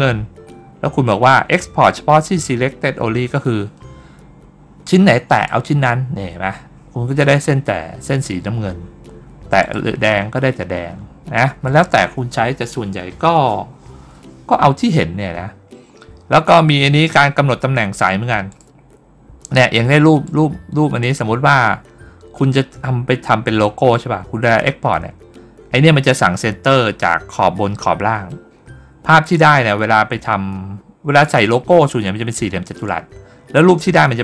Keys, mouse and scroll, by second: 5.2 click, 9.5 click, 11.5 click, 15.9 scroll down 1, 16.5 scroll down 1, 17.0 scroll up 1, 18.4 click, 20.1-20.8 drag, 29.1 click, 32.7-34.2 drag.